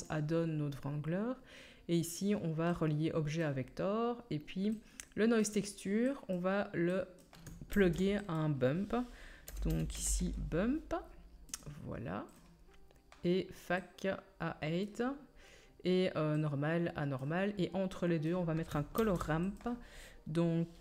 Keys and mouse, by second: 7.7 shift+a, 12.3-13.7 drag, 18.9 shift+a.